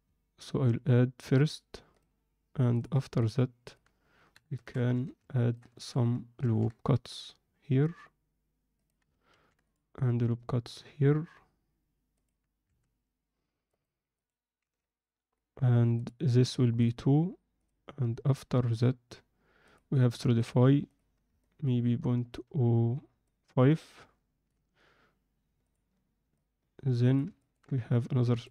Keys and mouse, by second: 1.2-2.0 drag, 2.7 click, 3.2-3.7 alt+middle drag, 4.3 KP_7, 4.5 Tab, 4.9 z, 5.3 ctrl+alt+middle click, 5.7 shift+middle click, 6.4 ctrl+r, 9.3 ctrl+r, 12.6 Tab, 13.6 right click, 14.6 z, 15.9-20.6 drag, 20.8 click, 21.4-22.3 alt+middle drag, 23.2-24.4 middle drag, 25.6-26.2 drag, 26.3-27.1 alt+middle drag, 27.4 ctrl+alt+middle click.